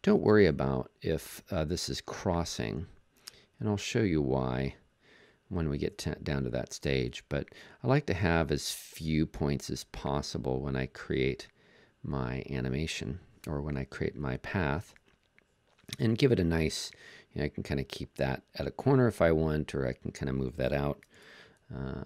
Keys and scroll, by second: 5.7 BackSpace, 6.6 BackSpace, 14.8 BackSpace, 15.8 BackSpace, 21.1 super+z.